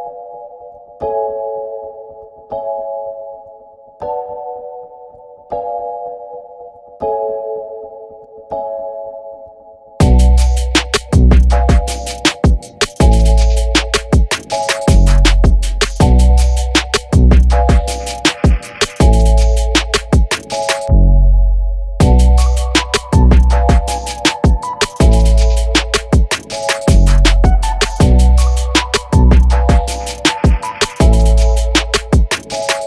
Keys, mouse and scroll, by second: 3.9 scroll down 1, 5.6-8.6 drag, 8.8 F9, 9.3 F9, 10.3-11.3 drag, 11.1 Left, 11.7 BackSpace, 12.7 shift+t, 14.4 click, 18.3-19.2 typing, 20.7 click, 21.3 KP_3, 21.4 KP_2, 22.6 click, 27.7 click, 29.3 click, 31.6-32.8 drag.